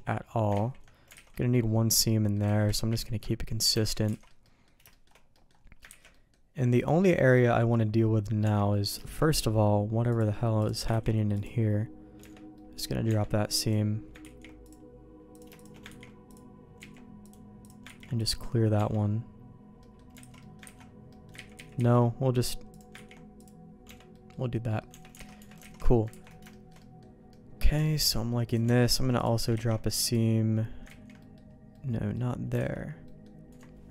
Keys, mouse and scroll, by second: 0.8 ctrl+z, 1.1 alt+a, 1.3 middle click, 2.0 middle click, 2.4 ctrl+z, 2.6 ctrl+z, 2.8 ctrl+z, 3.7 Tab, 4.1 alt+a, 4.4 middle click, 4.9 shift+middle click, 5.3 middle click, 5.9 ctrl+s, 6.1 middle click, 6.8 middle click, 7.3 middle click, 8.4 Tab, 8.7 middle click, 9.0 shift+middle click, 10.1 click, 10.9 ctrl+e, 12.2 Tab, 12.5 middle click, 13.0 Tab, 13.6 click, 14.2 ctrl+e, 15.3 click, 16.1 ctrl+e, 16.9 ctrl+z, 17.2 click, 18.1 ctrl+e, 18.7 Tab, 19.8 middle click, 20.2 alt+a, 20.4 middle click, 20.7 ctrl+s, 21.1 middle click, 21.5 ctrl+z, 21.5 ctrl+z, 21.7 ctrl+z, 22.7 click, 22.9 ctrl+e, 23.8 Tab, 24.1 middle click, 24.6 middle click, 24.9 Tab, 25.2 alt+a, 25.3 Tab, 25.6 alt+a, 26.1 ctrl+s, 26.5 shift+middle click, 26.8 middle click, 27.3 middle click, 27.8 shift+middle click, 28.5 click, 28.6 Tab, 29.1 click, 29.5 ctrl+e, 31.0 ctrl+z, 31.2 middle click, 31.7 middle click, 32.5 alt+a, 33.0 click, 33.5 Tab.